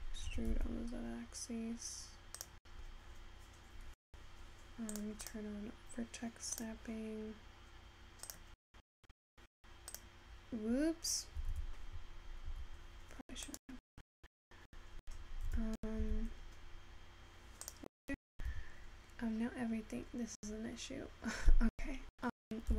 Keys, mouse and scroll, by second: 16.2 g.